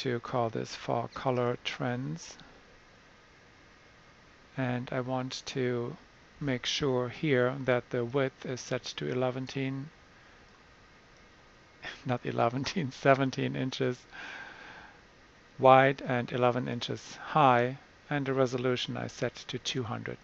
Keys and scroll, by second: 0.0-2.3 typing.